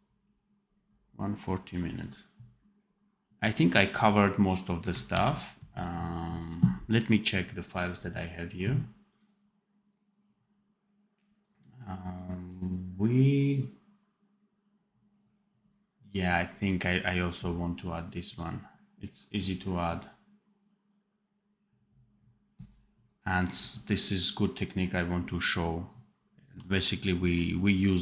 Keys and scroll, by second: 5.1 ctrl+s.